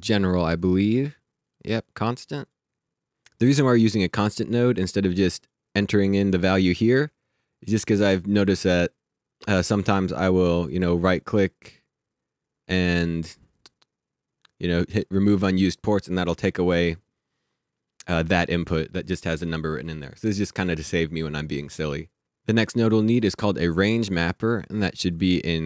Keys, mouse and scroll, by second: 1.4 click, 3.7 click, 5.4 click, 9.4 click, 10.6 right click, 18.5 click, 23.2-24.9 scroll down 1.